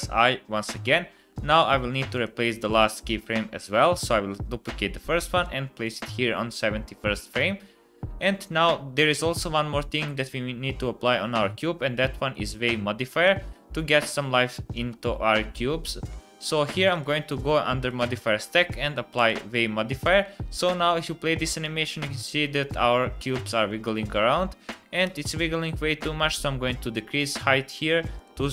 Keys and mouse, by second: 1.5-2.7 middle drag, 1.7 x, 2.8 click, 3.3 shift+d, 5.8 click, 13.2 space, 14.8 space, 20.2 space, 24.3 space, 25.2 space, 27.3 space, 28.1-28.5 drag.